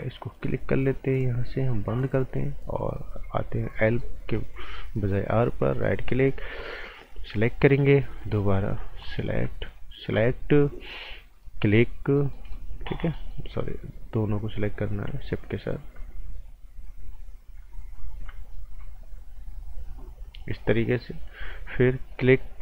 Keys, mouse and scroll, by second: 0.9 click, 3.7 right click, 4.2 scroll up 1, 4.3 right click, 4.9-5.6 scroll up 1, 5.7 alt+right click, 7.2 click, 7.6 scroll up 1, 8.2 right click, 9.0 click, 9.7 shift+click, 11.5 click, 12.1 right click, 14.5 click, 15.3 shift+click, 17.9 ctrl+shift+click, 19.0 ctrl+shift+click, 22.1 click, 22.5 scroll down 1.